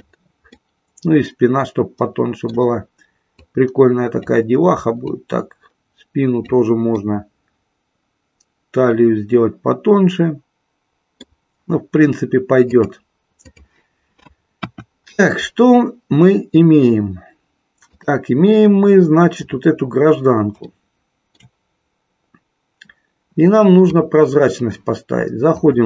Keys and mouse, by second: 0.5-2.5 middle drag, 3.4-4.4 drag, 5.0-6.5 drag, 7.0-11.4 middle drag, 12.7-13.6 drag, 14.6 KP_1, 20.6 shift+middle click, 23.9 click.